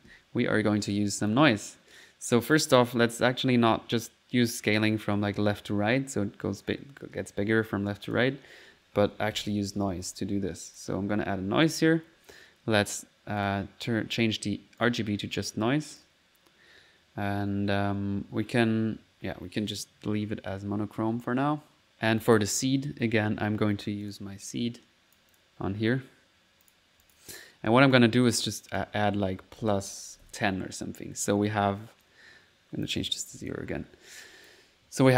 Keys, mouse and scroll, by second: 1.3 click, 2.6 click, 6.7 right click, 8.1 click, 8.8-10.0 typing, 10.2 click, 10.8 click, 11.4 middle click, 11.7 1, 12.7 1, 12.9 click, 13.4 click, 14.8 click, 16.0 click, 16.6 click, 22.3 click, 22.7 click, 24.1 click, 25.3 click, 26.3 typing, 26.7 click, 28.0 click, 28.8 click, 32.1-33.9 drag, 34.3-35.1 drag.